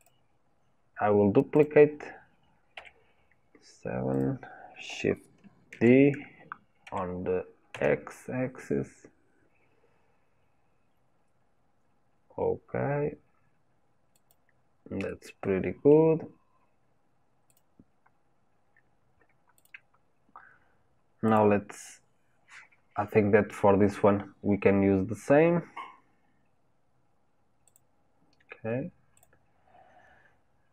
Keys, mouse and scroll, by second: 0.0 click, 1.6 click, 2.7 KP_7, 4.1-5.8 drag, 5.8 shift+d, 15.1-17.6 middle drag, 17.6 click, 19.6 click, 20.6 scroll down 2, 21.3 click, 29.2-30.7 drag.